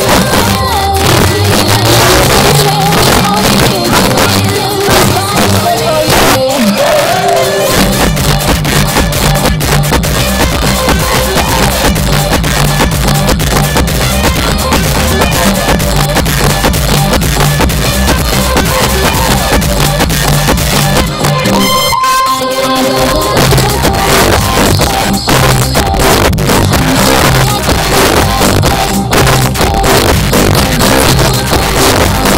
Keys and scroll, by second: 16.1 Page_Down, 32.3 space.